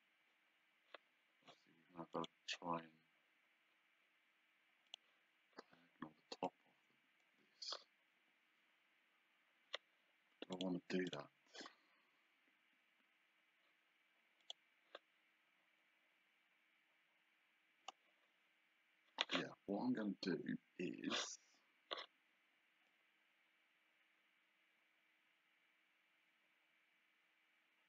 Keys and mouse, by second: 2.2 click, 4.9 click, 6.5 click, 10.6 click, 14.5 click, 22.9 click.